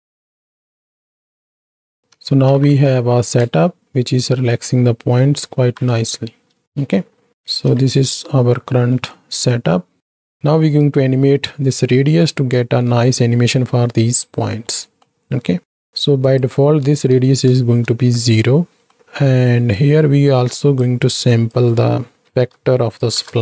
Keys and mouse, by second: 0.5 click, 1.4 middle click, 2.3 shift+Right, 2.5 shift+Left, 3.5 space, 5.8 shift+Left, 6.8 shift+Left, 6.8 space, 7.6 space, 9.0 click, 9.6-10.2 drag, 12.7 ctrl+space, 14.8 middle click, 15.6 middle click, 16.4-17.6 drag, 18.9 middle click, 19.9 click, 21.3-23.4 drag.